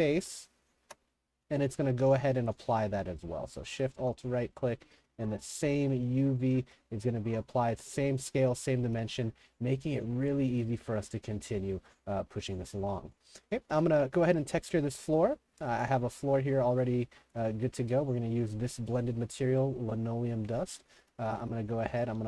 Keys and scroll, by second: 1.8-3.0 typing, 5.0 w, 5.2 w, 6.6-9.0 typing, 10.8 5, 11.4 w, 12.2 Escape, 13.7 s, 21.4 3, 22.1 w.